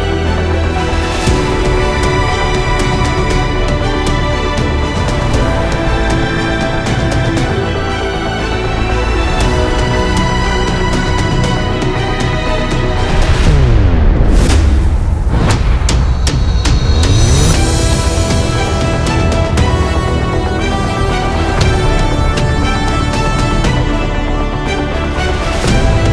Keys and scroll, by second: 5.0 Return, 8.5 b, 13.5-13.9 typing.